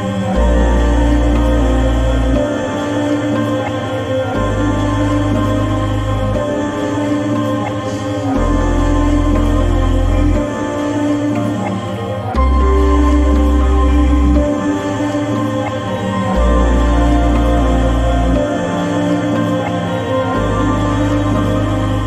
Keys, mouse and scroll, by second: 0.0 click, 0.0 typing, 2.2 typing, 2.4-4.3 drag.